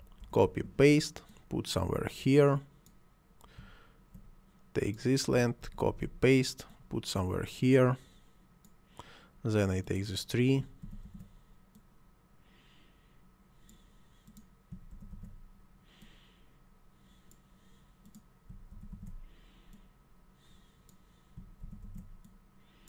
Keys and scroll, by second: 0.2 ctrl+c, 0.5 ctrl+v, 5.6 ctrl+c, 5.9 ctrl+v, 10.8 ctrl+c, 11.0 ctrl+v, 14.9 ctrl+c, 15.1 ctrl+v, 18.7 ctrl+c, 18.9 ctrl+v, 21.6 ctrl+c, 21.8 ctrl+v.